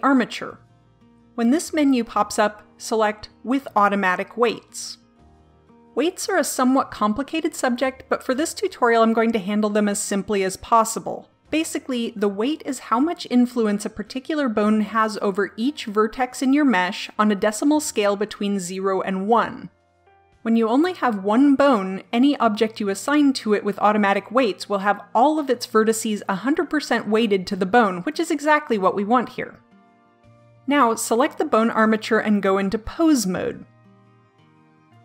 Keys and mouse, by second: 33.7 click.